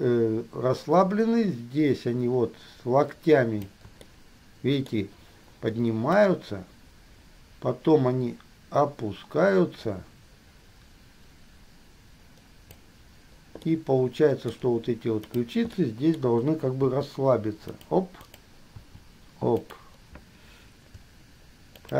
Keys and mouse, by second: 0.0-3.9 drag, 4.3 shift+middle click, 6.4-13.0 drag, 13.9-14.7 drag, 15.4 click, 15.9 click, 17.0 r, 18.4 click, 18.9 r.